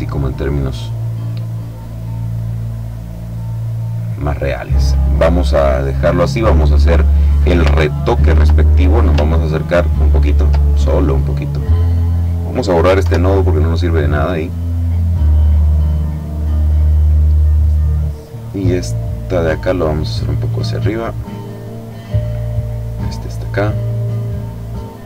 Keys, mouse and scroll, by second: 0.6-1.7 drag, 3.1 click, 6.5 click, 7.6-8.3 ctrl+scroll up 2, 9.3-9.8 ctrl+scroll down 1, 11.7 click, 12.8 Delete, 17.9-20.2 drag, 20.6-23.3 drag, 23.5-25.0 drag.